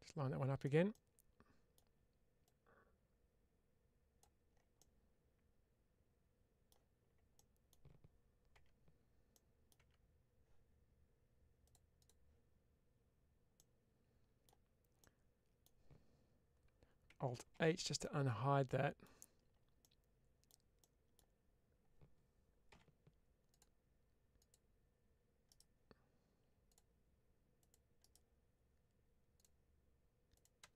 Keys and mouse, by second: 0.8 middle click, 2.4-4.1 drag, 4.6-6.5 middle drag, 7.2 middle click, 9.3 middle click, 11.5-12.7 drag, 13.5 middle click, 14.9 middle click, 17.4 alt+h, 17.9-18.9 middle drag, 19.7 middle click, 20.7 middle click.